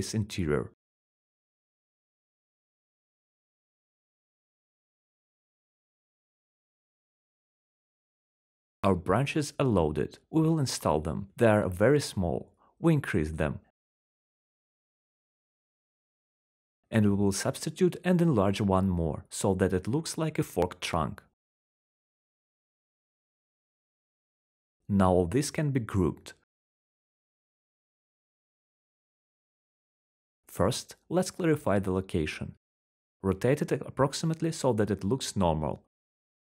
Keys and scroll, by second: 7.7 Delete, 9.6 ctrl+z, 12.6-14.2 typing, 15.7-17.2 typing, 18.5 r, 19.7 ctrl+z, 20.9 ctrl+z, 25.0 w, 29.3 q, 31.0 e, 32.7 w, 35.2 Escape, 35.5 s, 35.8 Escape.